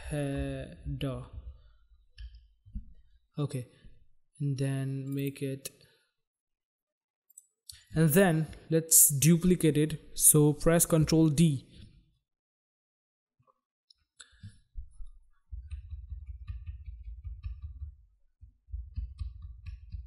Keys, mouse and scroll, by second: 0.0-1.9 typing, 2.3 Return, 5.0 click, 5.2 click, 5.3 click, 5.3 double click, 7.3 click, 7.4 click, 11.0 ctrl+d, 15.4 Down, 15.8 Down, 16.0 Down, 16.1 Down, 16.3 Down, 16.5 Down, 19.8 Down.